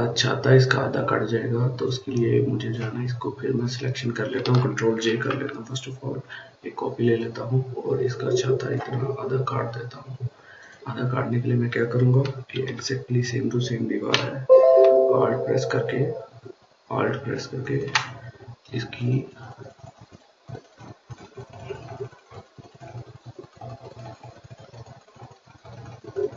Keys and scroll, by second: 4.9 ctrl+j, 12.3 [, 12.5 [, 12.8 [.